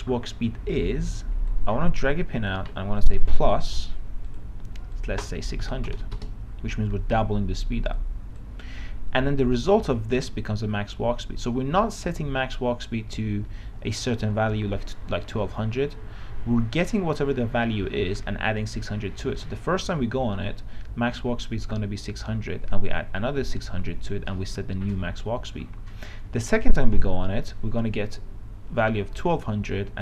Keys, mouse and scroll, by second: 5.9 KP_6, 6.1 KP_0.